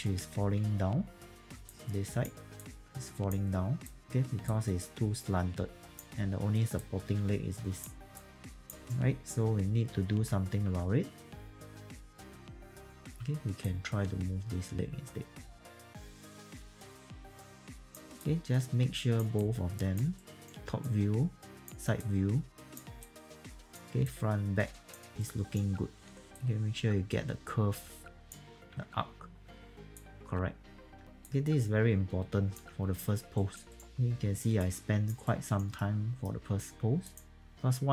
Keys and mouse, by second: 1.5 alt+2, 3.7 click, 10.1 alt+2, 10.7 alt+2, 11.4-13.5 typing, 11.5 click, 11.9 click, 13.6 click, 15.4 alt+click, 15.6 click, 16.0 alt+click, 16.1 alt+click, 16.3 click, 16.4 e, 16.5 click, 17.3 w, 17.7 alt+click, 18.2 alt+click, 19.3 alt+click, 20.2 alt+right click, 20.8 alt+click, 22.0 alt+click, 23.0 alt+click, 24.0 alt+click, 25.2 alt+right click, 26.2 e, 26.3 click, 28.7 q, 29.4 e, 29.9 click, 31.0 e, 31.2 click, 32.6 q, 33.3 alt+right click, 33.7 alt+right click, 33.8 alt+click, 34.6 alt+click, 35.2 alt+right click, 35.8 alt+middle click, 36.4 q, 37.0 click, 37.4 e.